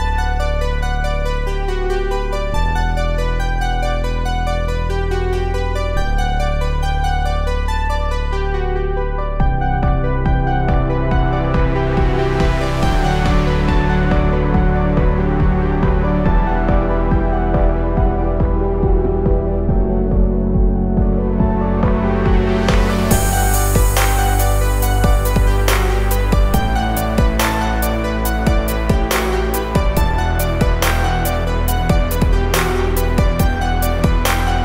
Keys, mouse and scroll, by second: 1.3-2.6 typing, 1.3 click, 7.7-8.4 typing, 7.9 click, 7.9 click, 12.1-21.3 drag, 21.3-26.0 drag, 26.0 Up, 27.9-34.2 drag, 34.4 click.